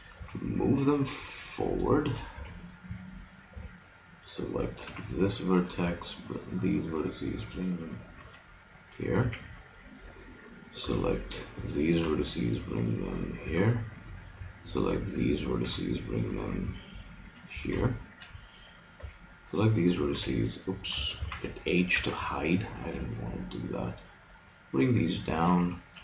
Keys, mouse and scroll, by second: 0.2 g, 2.4 a, 3.5 b, 4.9 g, 9.2 a, 10.9 b, 12.1 g, 13.5 a, 14.4 b, 15.7 g, 17.3 click, 17.5 a, 19.1 b, 19.4 click, 20.1 h, 21.2 ctrl+z, 22.0 g, 25.1-26.0 drag.